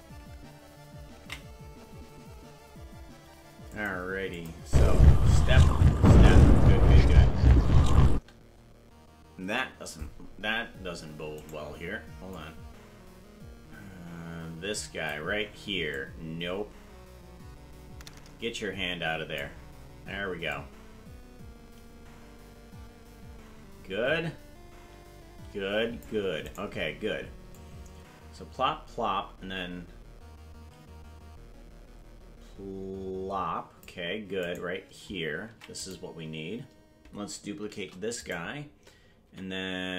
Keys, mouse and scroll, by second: 3.8 ctrl+s, 3.9 click, 4.4 click, 4.6 space, 8.1 space, 11.5 right click, 12.4-15.2 drag, 15.9-19.4 drag, 20.6-26.1 drag, 26.5 right click, 27.6-33.9 drag, 34.4 right click, 35.5 ctrl+Tab, 35.9 right click, 37.8 shift+d, 39.2 c.